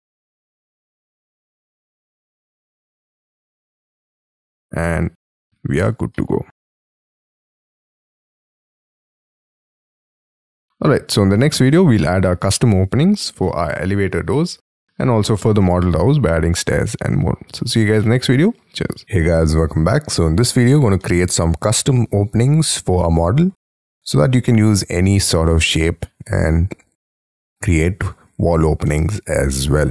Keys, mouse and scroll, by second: 3.0 middle click, 3.5-4.0 scroll down 5, 3.5 space, 4.0 y, 4.3 middle click, 5.0 scroll down 1, 5.0 y, 5.2 space, 5.5 Escape, 5.9 Escape, 6.1 middle click, 8.5 middle click, 9.0 middle click, 10.9 scroll down 6, 11.3 scroll up 6, 11.9 middle click, 14.0 scroll up 4, 14.3 middle click, 15.5 scroll down 5, 18.0 middle click, 21.0 middle click, 23.8 middle click, 24.5 scroll down 1, 28.9 middle click.